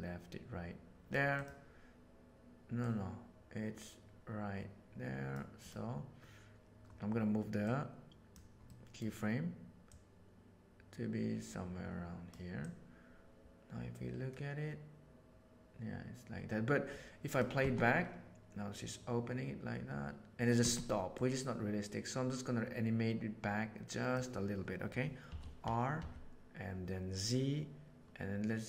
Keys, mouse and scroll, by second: 1.3 click, 2.8-5.3 drag, 5.6 click, 7.6 right click, 8.6 middle click, 9.9-12.1 drag, 17.6 space, 21.2-22.2 drag, 25.2 r.